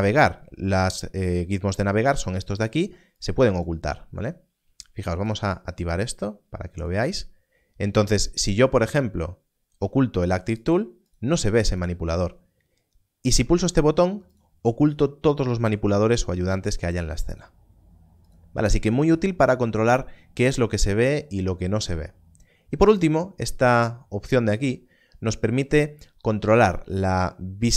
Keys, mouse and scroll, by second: 2.5 click, 10.6 click, 14.3 click, 16.9 click, 21.3 click.